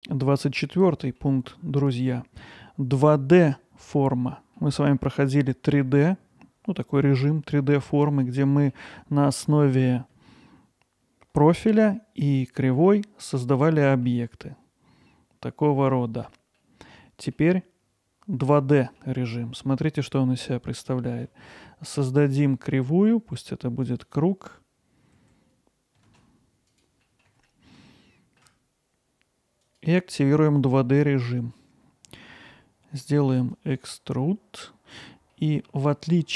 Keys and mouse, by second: 0.6-1.2 middle drag, 4.6-4.9 middle drag, 8.2-8.7 middle drag, 13.5-15.2 middle drag, 16.6-19.0 middle drag, 26.1 shift+z, 27.1 middle click, 27.5 alt+middle drag, 27.9-28.4 ctrl+alt+middle drag, 29.6 click, 33.5 click, 35.3 alt+middle click, 35.9-36.3 ctrl+alt+middle drag.